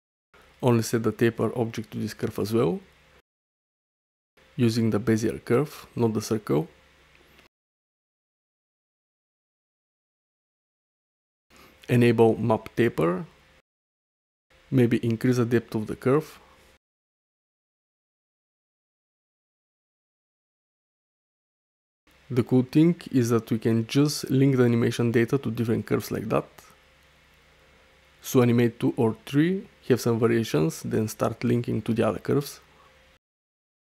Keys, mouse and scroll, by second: 3.4-4.6 drag, 5.6 ctrl+z, 6.2-7.3 drag, 8.8-9.9 middle drag, 10.1 space, 12.7 click, 14.7-15.8 drag, 15.9 space, 17.2 middle click, 18.5 middle click, 19.8 click, 20.6 space, 22.7 click, 23.2 space, 24.6 shift+click, 25.5 ctrl+l, 28.0 space, 29.1 space, 30.7-32.0 drag, 32.8 click, 33.3 click, 33.5 space.